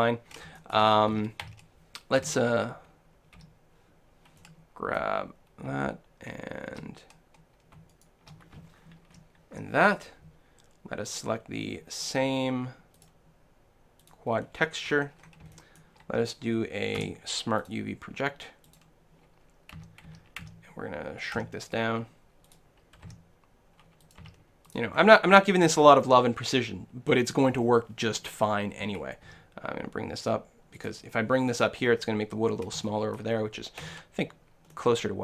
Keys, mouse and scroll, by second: 1.1 a, 1.5 a, 2.3 l, 3.4 l, 4.4-6.3 middle drag, 7.9-9.8 right drag, 9.3 ctrl+l, 9.9-12.3 right drag, 13.0-14.9 drag, 14.9 middle click, 15.7-17.5 shift+middle drag, 17.0 shift+u, 19.8 a, 20.1 a, 20.5 s, 21.4 s, 22.6-24.4 drag, 23.1 g, 24.2 s, 24.8-26.7 drag, 26.3 middle click, 29.3 s, 30.9-32.8 drag, 32.9-35.2 middle drag, 33.9 Tab.